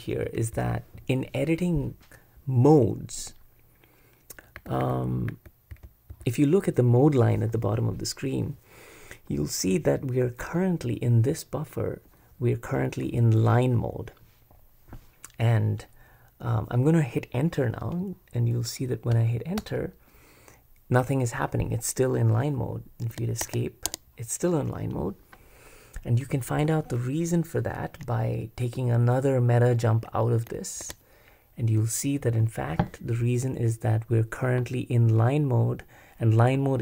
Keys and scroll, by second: 0.0-1.0 typing, 4.6-6.1 typing, 17.8 Return, 19.1 Return, 23.1 Escape, 23.8 Escape, 30.8 super+Escape.